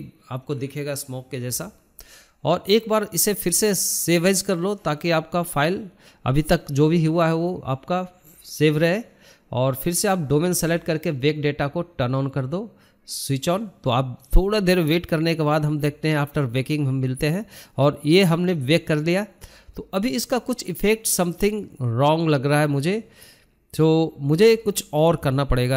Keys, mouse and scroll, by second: 0.5 KP_0, 1.5-5.1 drag, 7.6-8.0 scroll down 4, 8.0-8.4 scroll up 1, 8.4 click, 9.0-10.9 scroll down 6, 12.3-16.0 drag, 17.5-19.8 drag.